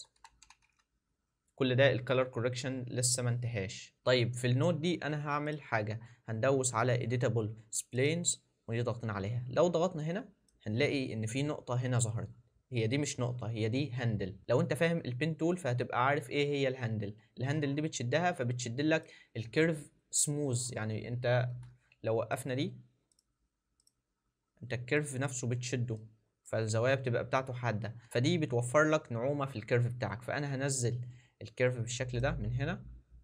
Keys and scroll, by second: 21.6 ctrl+z, 27.9 ctrl+z, 28.0 ctrl+z.